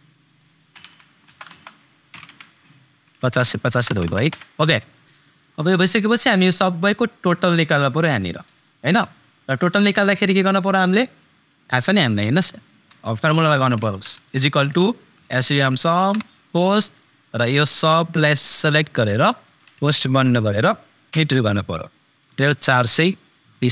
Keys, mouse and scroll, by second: 1.3 super+Return, 3.2 super+BackSpace, 5.7-10.1 super+drag, 14.9 super+s, 15.1 super+u, 15.4 super+m, 15.9 shift+super+9, 17.7-19.9 super+drag, 19.9 shift+super+0, 23.2 super+click.